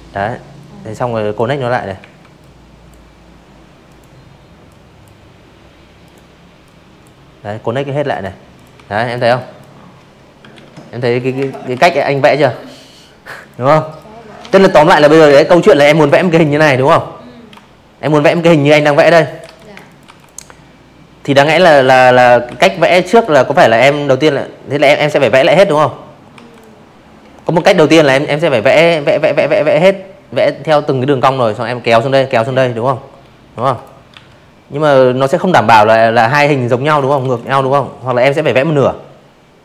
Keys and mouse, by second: 0.8 click, 1.6 click, 3.0 click, 3.6 click, 5.1 click, 5.5 click, 5.7 v, 6.0 click, 6.3 drag, 7.5 ctrl+z, 7.9 v, 8.2 click, 8.4 space, 8.5 click, 8.7 v, 8.8 click, 9.1 click, 10.3 click, 10.8 click, 11.4 shift+click, 11.7 z, 12.0 z, 12.1 click, 12.2 space, 12.4 click, 12.5 v, 12.7 click, 13.3 click, 14.5-15.0 alt+shift+drag, 15.2 click, 15.7-17.0 typing, 15.8 click, 16.2 click, 16.5 click, 16.8 click, 17.1 click, 18.4 space, 18.5 click, 18.8 z, 19.4 v, 19.6 click, 22.0 p, 23.3 v, 23.5 drag, 24.5 p, 30.5 v, 30.7 click, 31.1 p, 33.8 space, 33.9 click, 34.1 v, 34.3 click, 35.0 p, 37.3 shift+click, 38.3-39.6 drag.